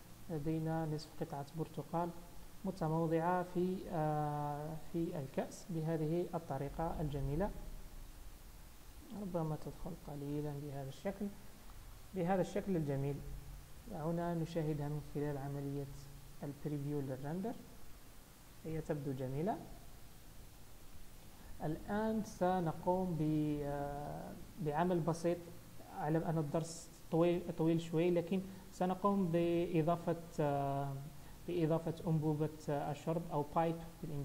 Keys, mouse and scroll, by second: 0.4 scroll down 1, 0.4-0.9 scroll up 5, 1.2 shift+middle click, 1.6 scroll up 1, 2.1 click, 3.2 g, 5.4-5.9 scroll down 4, 6.0 middle click, 8.1 KP_0, 8.7-9.1 scroll up 4, 9.7 g, 10.7-11.1 scroll down 8, 11.4 shift+middle click, 12.5-13.0 scroll down 2, 13.0-13.4 scroll up 2, 14.3 click, 16.1 click, 23.5 click, 24.1-25.3 scroll up 2, 25.3 KP_1, 26.3-26.8 scroll up 2, 27.0 shift+middle click, 27.6-27.9 scroll up 2, 28.4 scroll up 1, 28.6-29.5 scroll down 2.